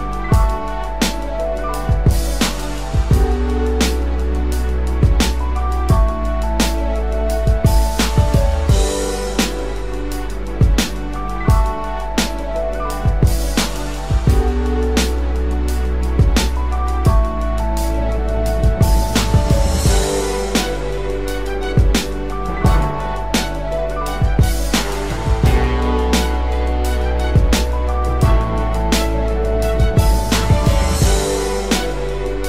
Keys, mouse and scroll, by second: 3.3 double click, 6.1 double click, 29.6 double click, 31.0-31.6 ], 31.9 ], 32.0 ].